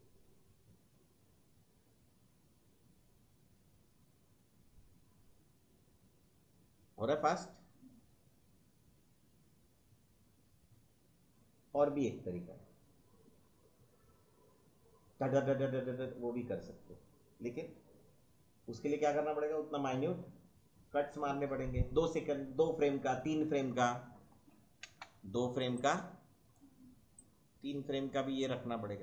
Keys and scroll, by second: 24.8 space.